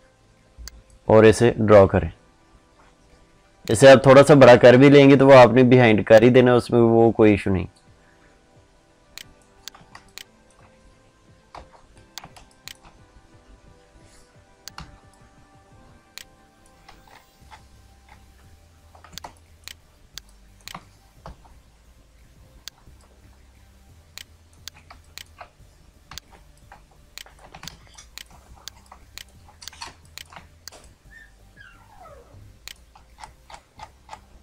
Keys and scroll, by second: 9.7 ctrl+space, 19.0 ctrl+space, 24.6 ctrl+space.